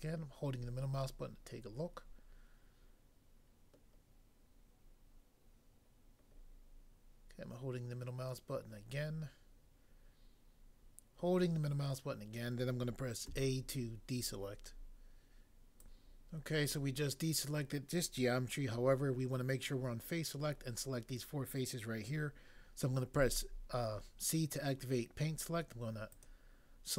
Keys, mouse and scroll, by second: 13.3 a, 15.8 click, 16.0 click, 23.1 c, 26.2 click.